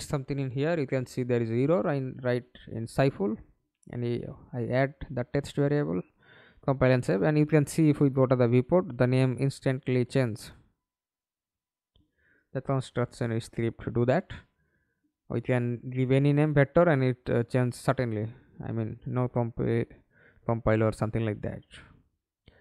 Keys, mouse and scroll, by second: 0.0-0.3 typing, 15.0-16.9 typing, 16.9 Return, 19.7-22.4 typing.